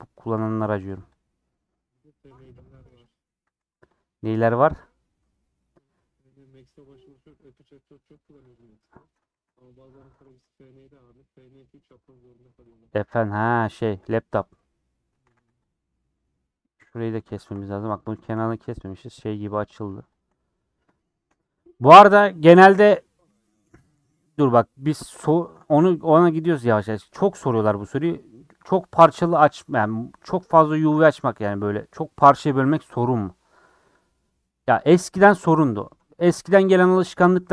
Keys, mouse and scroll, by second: 1.2 click, 1.5-3.1 middle drag, 3.1 click, 3.4 a, 4.0 u, 4.8-8.5 middle drag, 8.5 click, 9.3 ctrl+z, 9.5 click, 10.2 ctrl+z, 10.6 click, 11.3-14.4 middle drag, 14.4 click, 14.5 middle click, 15.2 a, 15.4 u, 15.8-16.9 middle drag, 16.9 click, 17.5 middle click, 18.2 shift+click, 18.6 middle click, 19.5 shift+click, 20.1 shift+Left, 20.3 middle click, 21.1 shift+Left, 21.7 scroll down 3, 21.9 middle click, 22.3 a, 22.5 u, 24.1-36.2 middle drag.